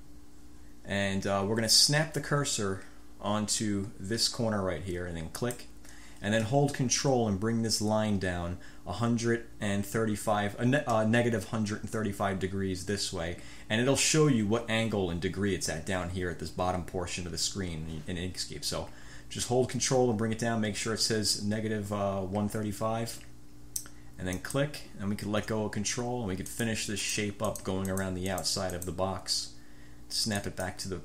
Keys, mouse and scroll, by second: 5.5 click, 24.5 ctrl+click, 26.7 click, 27.2 click, 27.7-28.4 drag, 28.5 click, 28.9 click, 30.5 click.